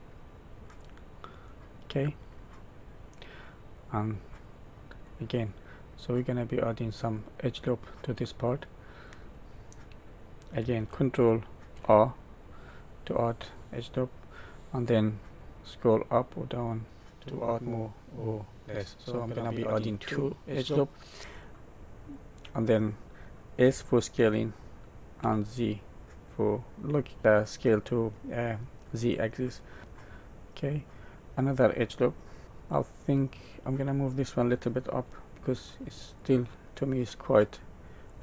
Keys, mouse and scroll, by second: 1.4 middle click, 4.4 click, 5.0 middle click, 8.3 middle click, 11.7 ctrl+r, 30.3 middle click, 32.7 middle click, 36.1 click, 38.0 click.